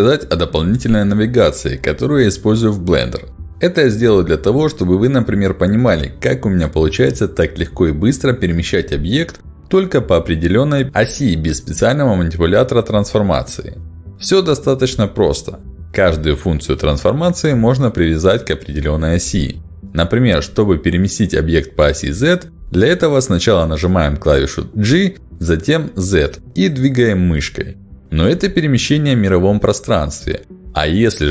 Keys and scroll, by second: 7.0 g, 7.3 z, 9.6 g, 9.9 y, 25.2 g, 26.5 z.